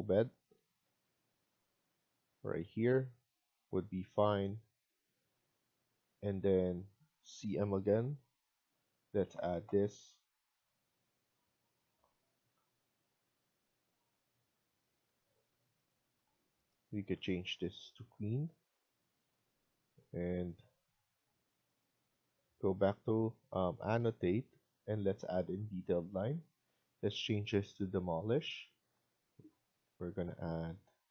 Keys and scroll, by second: 0.7 Escape, 1.0 Escape, 7.9-8.7 typing, 15.0 Escape, 15.2 Escape, 18.4 Escape, 18.6 Escape.